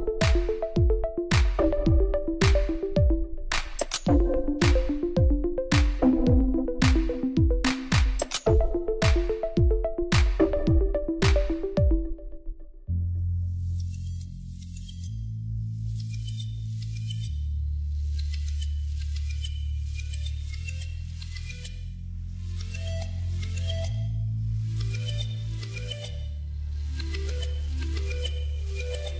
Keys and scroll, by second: 2.4 Tab, 4.5 shift+z, 5.3 alt+a, 9.4 1, 11.1 m, 13.3 3, 14.9 shift+z, 16.1 u, 18.2 Tab, 19.6 alt+a, 25.7 shift+a, 26.7 g, 26.9 z, 27.5 Tab, 27.8 s, 28.0 z.